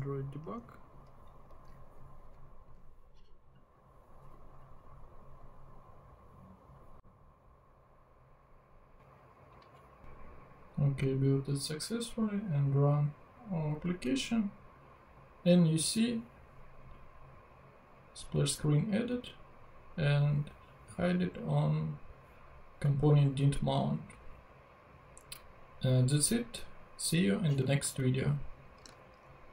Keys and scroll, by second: 1.5 super+Tab.